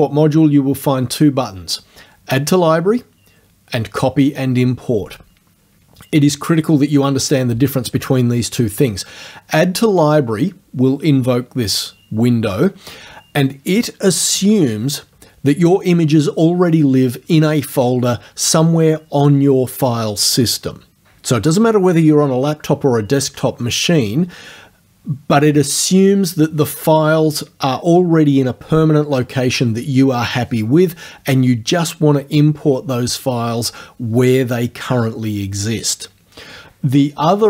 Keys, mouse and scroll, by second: 9.9 click.